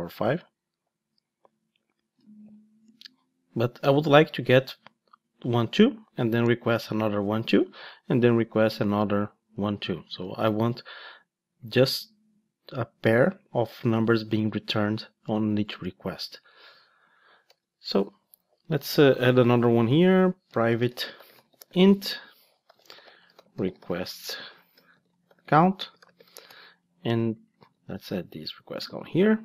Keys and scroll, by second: 19.6 Tab, 27.6 super+c, 28.8 super+v.